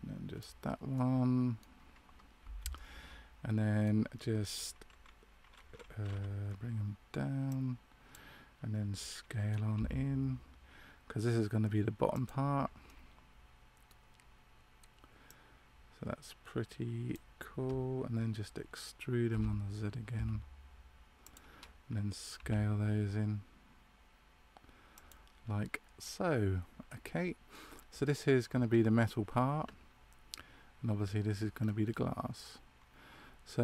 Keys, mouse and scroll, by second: 2.7 middle click, 7.4 click, 9.7 s, 12.8 middle click, 15.2 click, 26.8 middle click, 31.5 scroll down 2, 32.3 middle click.